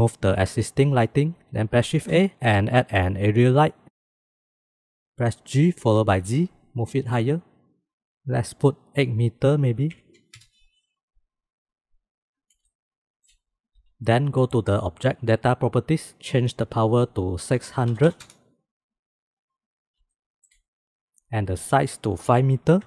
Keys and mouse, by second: 0.7 x, 1.9 shift+a, 5.9 g, 9.0-11.0 drag, 13.1 shift+click, 17.0-19.0 drag, 18.2 KP_0, 19.9 shift+middle click, 20.0 shift+click, 20.1 shift+middle click, 20.4 middle click, 21.9-22.8 drag.